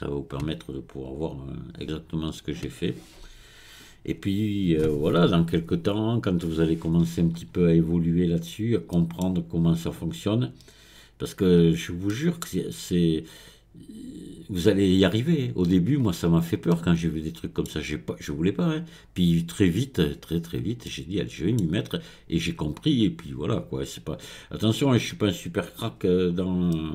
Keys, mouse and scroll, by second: 1.2 click, 7.3 scroll up 3, 8.5-9.0 scroll up 1, 9.0-11.6 middle drag, 11.6-12.2 scroll down 3, 12.2-15.2 middle drag, 16.3 scroll up 2, 16.8-18.8 middle drag, 18.8-19.5 scroll down 1, 19.5-20.3 scroll down 1, 20.3-20.9 scroll up 2, 20.9-23.9 middle drag, 24.9-26.4 drag, 26.4-26.8 scroll down 2, 26.8-26.9 middle drag.